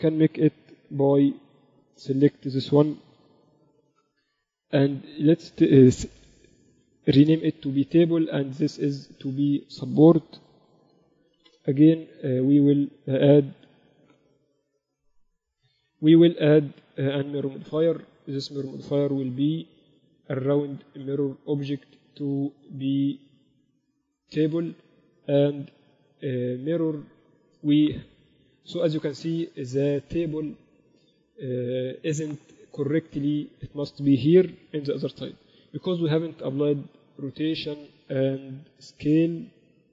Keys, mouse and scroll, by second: 1.7-3.9 right drag, 3.6 click, 4.1 ctrl+Up, 8.9-10.7 right drag, 9.7-11.7 drag, 11.3 p, 13.6-15.3 right drag, 16.5-18.5 ctrl+alt+shift+right drag, 17.7-19.9 ctrl+alt+shift+drag, 20.5-22.3 drag, 25.7-27.8 drag, 29.0-30.5 middle drag, 36.2 ctrl+a, 39.3 ctrl+a.